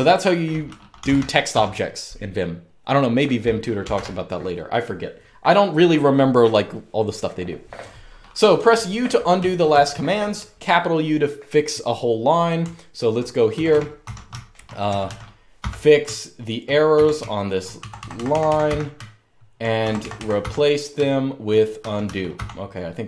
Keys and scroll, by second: 0.5-1.7 typing, 3.3-4.1 typing, 8.2-10.1 typing, 12.1-22.5 typing.